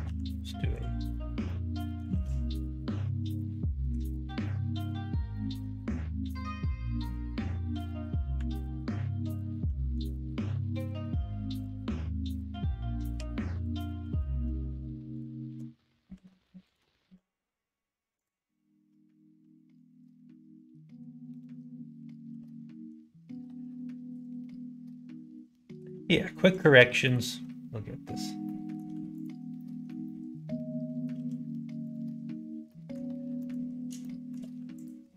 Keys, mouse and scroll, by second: 0.0 ctrl+f, 1.4 middle click, 2.1 ctrl+z, 3.3 middle click, 4.4 middle click, 5.3-6.9 middle drag, 13.1 2, 13.5 click, 14.0 alt+click, 15.1 alt+shift+click, 16.1 ctrl+z, 16.6 alt+shift+click, 16.9 x, 22.2 x, 24.3 middle click, 25.4 click, 25.7 x, 27.0 middle click, 28.4 middle click, 29.2 alt+click, 29.5 middle click, 30.0 middle click, 31.1 x, 32.7 middle click, 33.3 middle click, 33.9 shift+middle click, 34.7 alt+click.